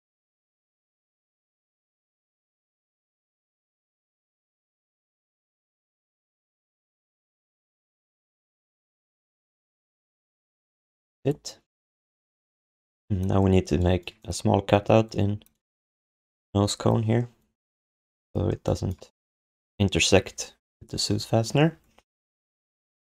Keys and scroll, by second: 0.7 alt+q, 1.5 alt+q, 3.3 alt+q, 6.8 alt+shift+d, 7.2 ctrl+s, 8.7 BackSpace, 8.8 Return, 10.9 ctrl+s, 14.7 1.